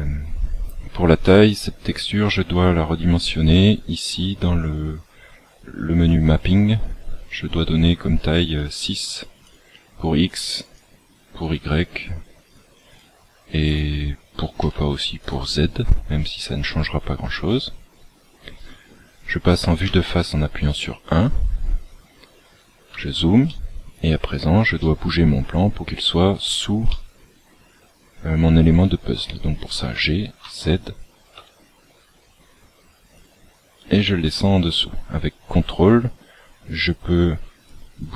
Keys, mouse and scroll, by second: 1.8 click, 9.4 click, 10.5 click, 13.6 click, 19.7 KP_1, 21.0-22.0 scroll up 12, 22.5 scroll up 10, 23.4 shift+middle click, 24.2-24.6 scroll up 2, 24.7 shift+middle click, 25.7-26.2 scroll up 1, 26.8 shift+middle click, 29.8 g.